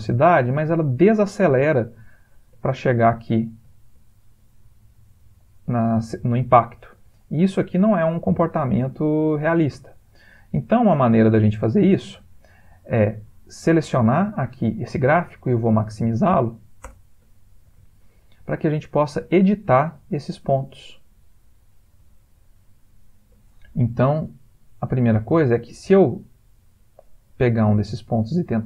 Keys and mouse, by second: 0.6 click, 2.7 ctrl+middle click, 2.9 ctrl+middle click, 3.3 middle click, 3.7 ctrl+middle click, 5.4 click, 10.7 click, 11.3 click, 12.9 shift+middle click, 13.1 shift+middle click.